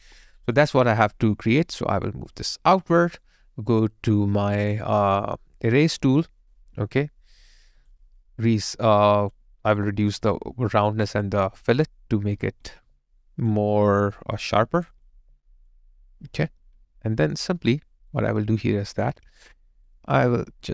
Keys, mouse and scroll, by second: 3.0 alt+middle click, 7.6 alt+click, 12.7 alt+click, 15.9 alt+middle click, 17.5 alt+right click, 18.3 alt+middle click.